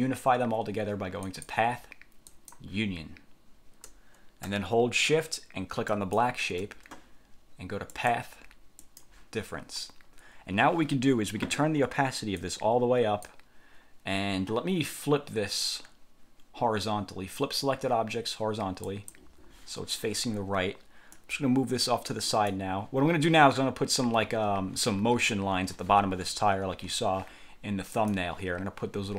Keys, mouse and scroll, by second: 1.4 click, 2.4 click, 6.0 shift+click, 8.0 click, 9.0 click, 12.5 click, 19.0 click, 21.3-22.8 drag, 28.1 click.